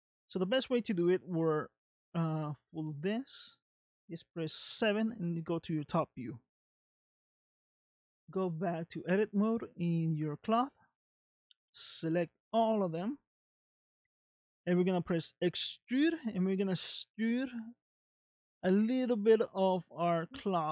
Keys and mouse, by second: 1.1 middle click, 5.1 KP_7, 8.3 click, 10.4 Tab, 11.7 a.